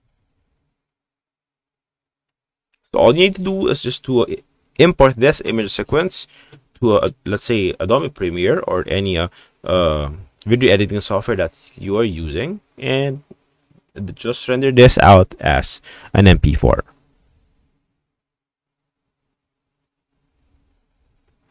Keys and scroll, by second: 0.5 Right, 0.8 Right, 1.3 Right, 1.5 Right, 2.0 Right, 2.2 Right.